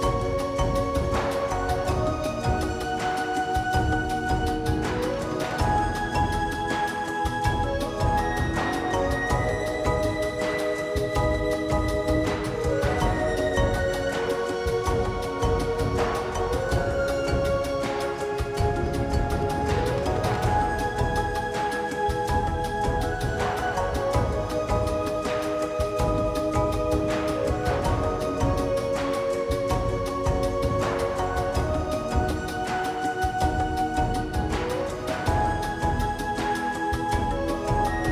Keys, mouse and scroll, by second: 0.8-1.2 drag, 1.8-2.3 drag, 3.0-3.3 drag, 4.0 click, 5.4 click, 5.6 click, 5.9 Tab, 6.7 middle click, 7.0 e, 7.2 middle click, 7.6 ctrl+z, 8.0 KP_1, 8.9 KP_1, 9.2 Tab, 9.6 click, 11.5 drag, 12.0-12.4 drag, 12.8 click, 13.1-13.8 scroll down 7, 13.8 click, 14.7-15.3 scroll down 9, 15.3 middle click, 15.8-16.3 scroll down 2, 16.2 click, 16.6-18.6 middle drag, 17.8 Delete, 18.6 Delete, 19.0 click, 19.2 KP_1, 19.4 scroll up 1, 19.5 Tab, 19.7-21.0 shift+middle drag, 21.0 g, 23.0 scroll up 2, 23.1 shift+middle click, 23.4-24.5 right drag, 24.5 middle click, 24.7 scroll down 3, 24.8-26.2 middle drag, 26.2 ctrl+z, 26.4 ctrl+z, 27.0 middle click, 27.5 shift+click, 27.6 middle click, 28.0 KP_1, 28.1 scroll up 2, 28.3 g, 28.9 g, 30.5 g, 31.4 g, 32.7 right click, 33.4 Tab, 33.7 Tab, 34.1 ctrl+z, 34.3 ctrl+z, 35.2 1, 35.3 alt+z, 36.2 click, 36.7-37.7 drag, 37.9 scroll up 1, 38.0 shift+middle click.